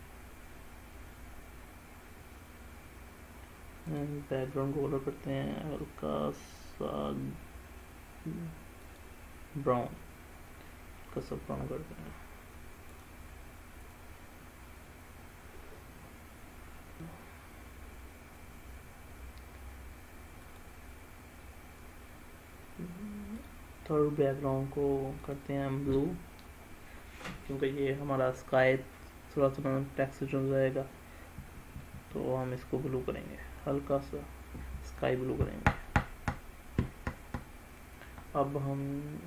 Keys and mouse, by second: 4.0 click, 20.6 click, 23.4-39.2 drag.